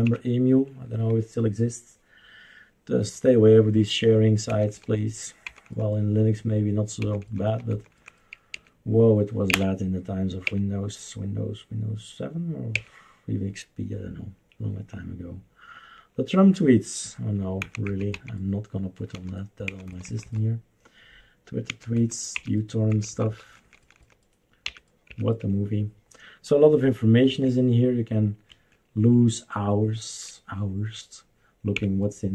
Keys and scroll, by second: 0.0 Up, 4.5 Down, 5.4 Down, 5.7 Down, 7.0 Down, 7.2 Down, 7.4 Down, 7.7 Down, 8.0 Down, 8.5 Page_Down, 9.5 Page_Down, 10.4 Page_Down, 12.7 Page_Down, 17.6 Down, 17.8 Down, 18.1 Down, 19.1 Down, 19.7 Down, 19.9 Down, 20.1 Down, 20.3 Down, 21.7 Down, 22.0 Down, 22.3 Up, 22.9 Down, 23.1 Down, 23.3 Down, 23.4 Down, 23.7 Down, 23.8 Down, 24.1 Down, 24.6 Up, 27.3 Escape, 31.7 Left.